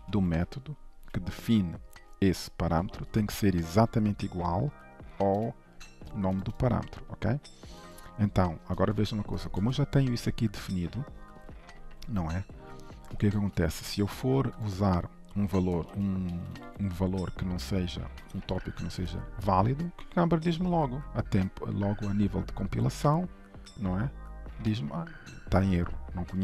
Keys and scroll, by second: 0.3 ctrl+s, 3.1 ctrl+Tab, 5.5 ctrl+b, 7.8 ctrl+Tab, 11.7 ctrl+shift+Right, 13.4 ctrl+Tab.